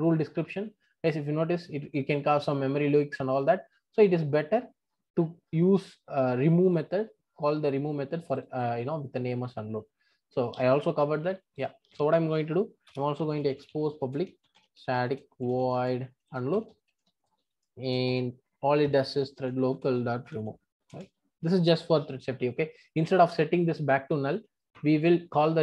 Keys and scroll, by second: 19.7 Return.